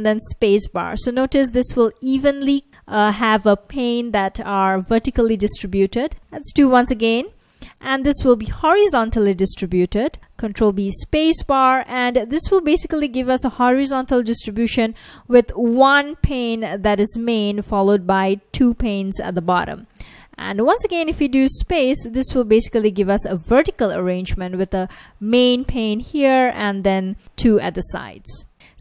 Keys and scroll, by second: 0.1 space, 6.2 ctrl+b, 6.2 space, 10.3 ctrl+b, 15.5 F1, 17.9 F1, 18.6 F1, 20.9 ctrl+b, 21.5 space, 22.9 F1, 25.0 F1, 25.9 F1, 27.2 F1, 27.6 F1.